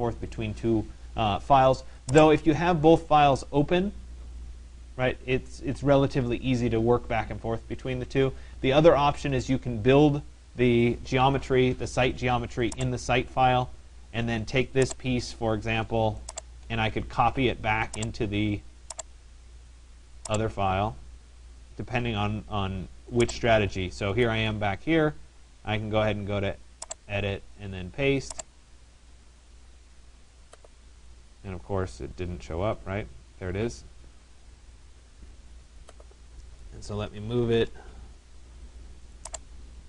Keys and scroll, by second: 10.9 Escape, 37.3 Return.